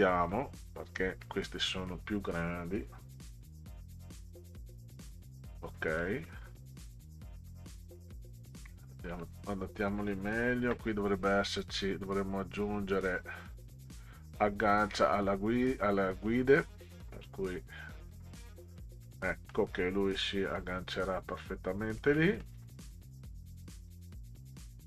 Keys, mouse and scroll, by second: 0.2 click, 1.2 middle click, 3.4-5.1 drag, 6.0 middle click, 9.2 middle click, 11.5 click, 14.0 scroll down 2, 15.7 click, 17.9 click, 19.0 middle click, 22.2 middle click, 23.9-24.8 drag.